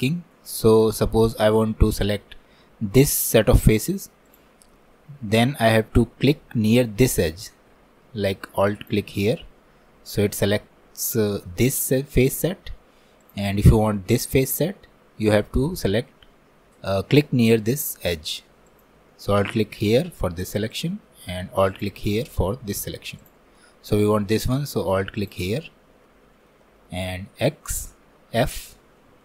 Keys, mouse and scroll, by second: 4.3-7.4 drag, 8.8-11.8 alt+drag, 13.3-16.2 drag, 18.7-25.8 alt+drag, 25.8-26.1 scroll down 2, 26.1-27.5 middle drag, 27.5 x, 28.9-29.2 scroll down 1.